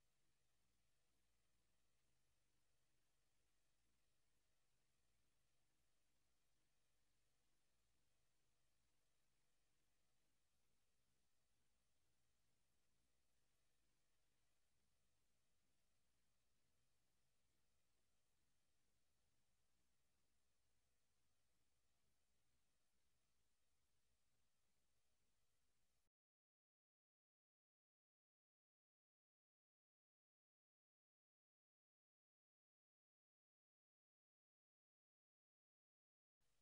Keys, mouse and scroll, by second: 0.5 click, 1.9 shift+d, 3.5 click, 3.9 r, 5.8 click, 5.8 middle click, 7.8 click, 9.8 click, 13.3 Escape, 36.3 click, 36.5 scroll up 1.